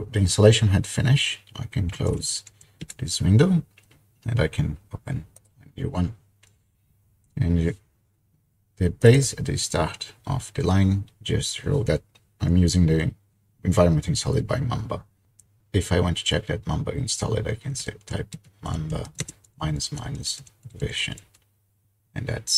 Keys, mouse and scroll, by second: 1.6-2.9 typing, 5.4 click, 6.4 typing, 9.0 click, 17.9-21.5 typing.